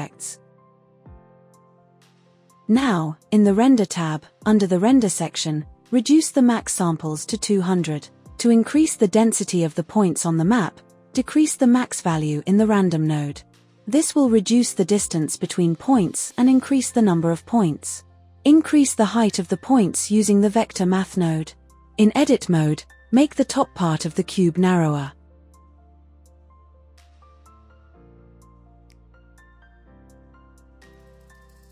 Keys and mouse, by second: 4.5-5.6 drag, 5.6 KP_0.